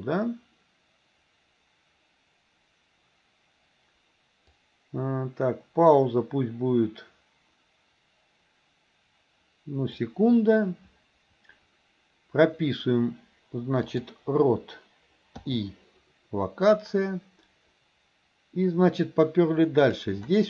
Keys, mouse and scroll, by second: 4.7-10.1 drag, 13.8 click, 16.9-20.2 drag.